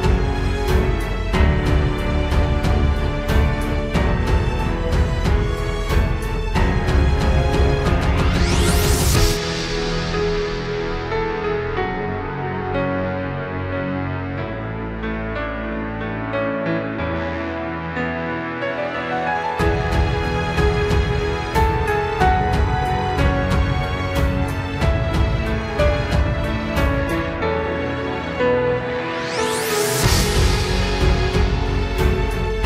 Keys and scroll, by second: 0.4 ctrl+z, 1.6 ctrl+space, 4.4 ctrl+space, 4.8 ctrl+t, 5.0 ctrl+z, 5.3 ctrl+z, 6.9 ctrl+space, 7.4 ctrl+space, 15.7 ctrl+t, 16.1 ctrl+space, 17.1 ctrl+s, 18.1 ctrl+space, 19.6 ctrl+t, 20.6 ctrl+z, 22.9 ctrl+space, 24.1 ctrl+t, 29.2 ctrl+t.